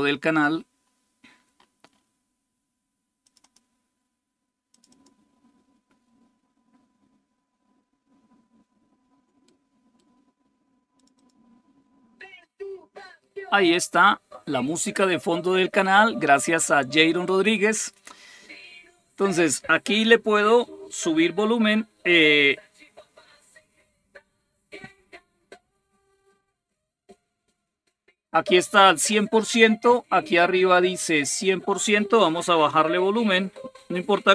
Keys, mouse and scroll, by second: 0.0-0.6 scroll down 1, 0.6-1.4 scroll down 1, 1.4-3.0 scroll down 1, 3.0 click, 4.5 click, 9.3 click, 10.8 click.